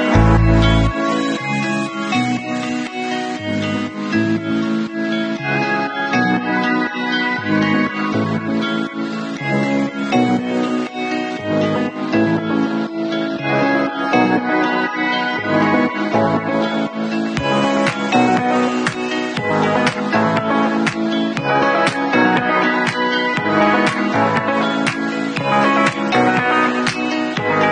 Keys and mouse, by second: 4.0 alt+middle click, 4.0-27.7 alt+drag, 4.6 ctrl+shift+f, 6.7 shift+a, 20.9 ctrl+shift+f.